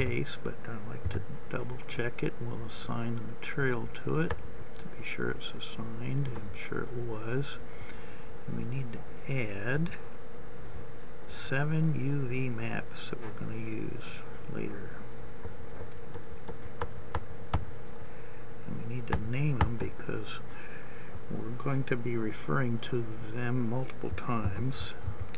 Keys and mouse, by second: 1.6 a, 5.6 click, 7.5 click, 12.8-14.8 drag, 21.3 click, 21.7-25.3 middle drag.